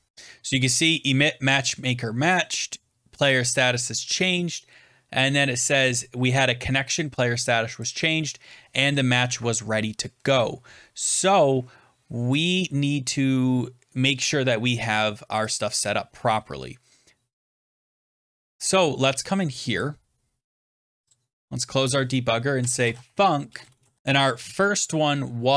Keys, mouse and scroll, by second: 0.1 click, 2.3 click, 4.2 click, 7.8 click, 15.4 click, 19.7 click, 21.0 click, 22.2-24.4 typing, 24.0 scroll.